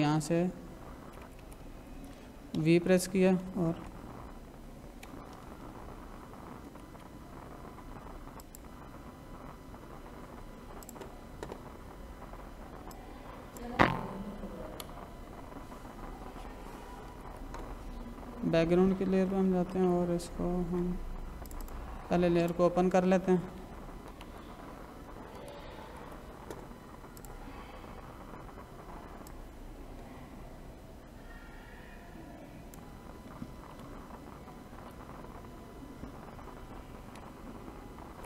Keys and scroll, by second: 2.5 v, 3.8 Left, 6.6 ctrl+=, 14.7 Escape, 17.1 ctrl+-, 19.7 ctrl+=, 24.1 ctrl+=, 25.4 ctrl+-, 34.6 ctrl+j, 37.1 Left.